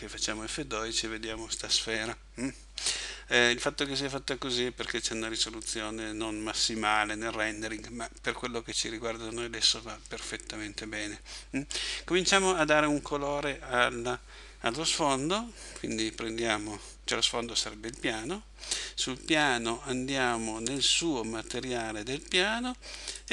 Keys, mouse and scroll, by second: 12.6 Escape, 15.8 right click, 20.8 click, 23.2 click.